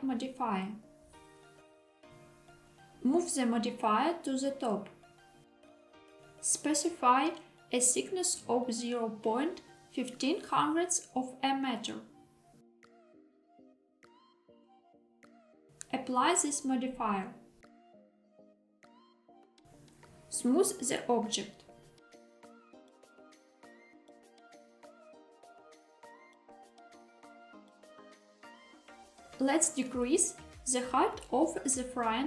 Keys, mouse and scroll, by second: 2.8-4.3 drag, 6.6-13.2 drag, 13.9 Tab, 15.9-18.2 drag, 19.9-21.6 right drag, 23.7 click, 25.4 click, 26.8 click, 28.4 KP_1, 30.0 s, 31.3 z.